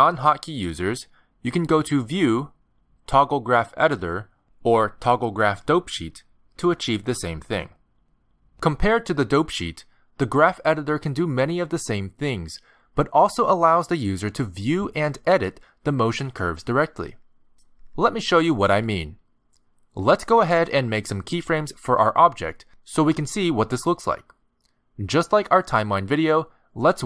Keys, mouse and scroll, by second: 1.0 click, 5.5 click, 10.3 ctrl+Tab.